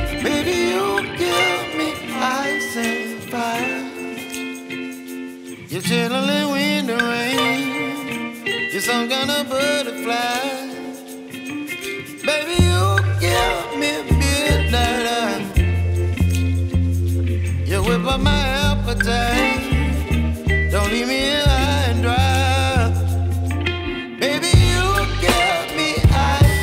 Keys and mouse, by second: 5.4 click, 14.3 click, 21.3 click, 21.9 click, 24.5 click.